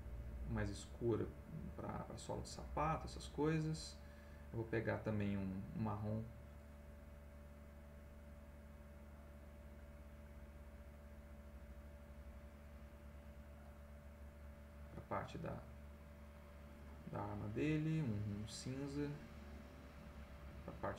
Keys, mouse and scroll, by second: 0.2 middle click, 1.2 middle click, 2.8 middle click, 3.9 right click, 5.8 click, 7.4 click, 8.5 right click, 9.4 click, 13.6 click, 15.5-16.9 drag, 18.3 right click, 19.3 click.